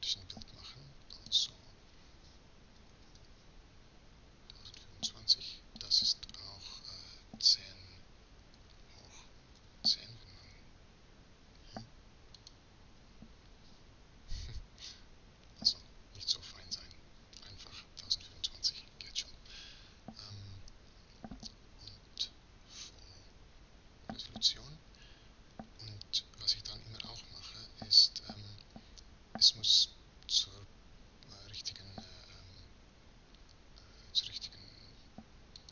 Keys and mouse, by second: 2.2-8.7 drag, 8.7 shift+8, 12.4 click, 22.7-27.8 drag, 35.6 click.